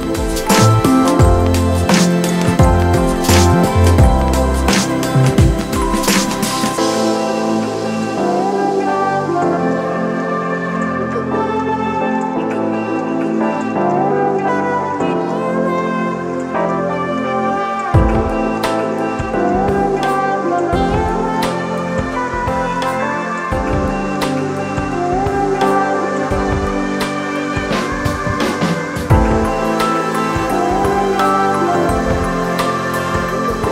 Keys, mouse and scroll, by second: 19.0 alt+shift+click, 22.6 alt+shift+click, 25.7 alt+shift+click, 31.5 ctrl+click, 33.3 ctrl+click.